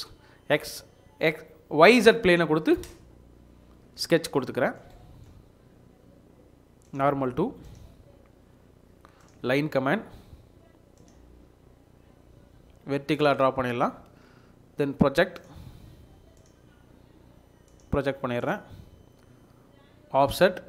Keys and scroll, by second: 13.4 Escape, 13.8 Escape, 18.8 Escape.